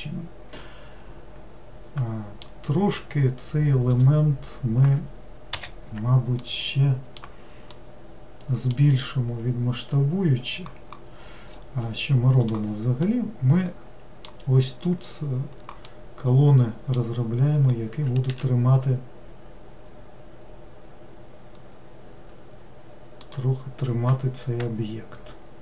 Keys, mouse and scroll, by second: 4.0 click, 5.6 l, 6.5-10.9 middle drag, 13.1-17.7 middle drag, 17.7-18.3 scroll up 1, 18.3 s.